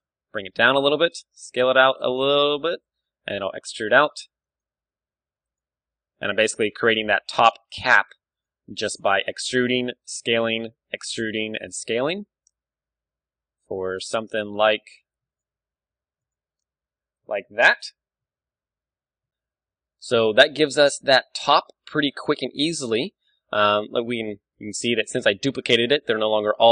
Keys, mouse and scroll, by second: 1.0-2.5 drag, 1.2 s, 2.9-4.4 drag, 3.2 e, 4.6-13.5 drag, 4.8 e, 5.6 s, 6.9 e, 7.9 s, 8.6 e, 9.8 s, 10.5 e, 13.0 s, 13.9-18.9 drag, 15.1 g, 15.5 e, 16.4 s, 19.6-21.2 middle drag, 21.0 Tab, 21.4 middle click, 21.9 middle click, 22.7 KP_1, 23.2-24.8 middle drag, 23.5 Tab, 23.9 a, 24.2 a, 24.5 w, 26.6 Tab.